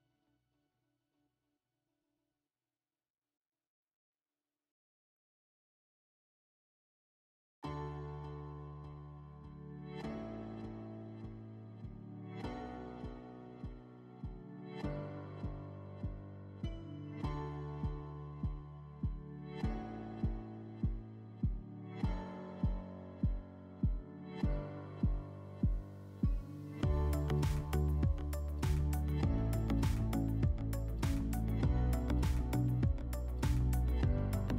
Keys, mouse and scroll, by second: 1.6 click, 3.8 click, 6.1 click, 7.1 e, 9.5 click, 10.7 click, 14.2 click, 15.9 click, 18.6 click, 21.5 click, 22.9 click, 25.3 alt+w, 28.9 click, 31.3 click.